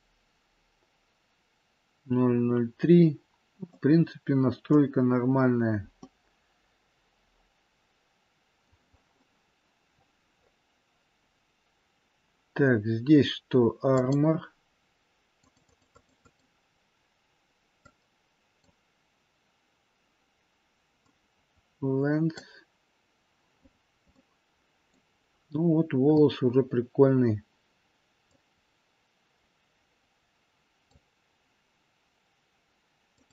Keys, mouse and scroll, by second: 3.0 scroll down 1, 3.6 middle click, 5.0-5.9 scroll down 2, 5.9 middle click, 9.8-13.3 scroll up 6, 13.8 click, 15.3 click, 17.2 click, 17.6 click, 20.8 click, 23.5-23.9 scroll up 4, 24.0 middle click, 25.2-27.0 scroll down 2, 28.2 click, 33.0 click.